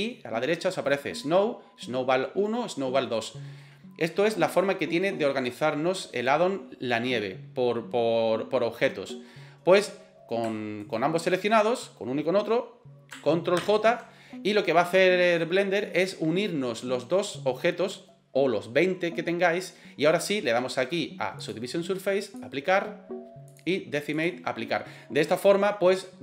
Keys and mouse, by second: 10.8 shift+right click, 14.0 ctrl+j, 21.4-23.1 drag, 23.5-24.5 drag.